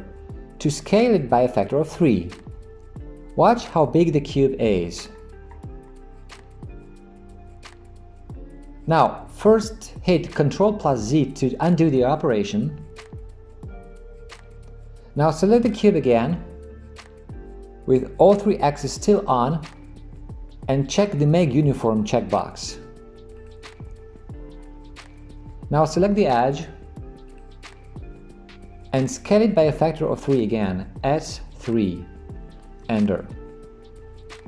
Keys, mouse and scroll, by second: 13.8 ctrl+z, 16.2 click, 23.4 click, 31.1 s.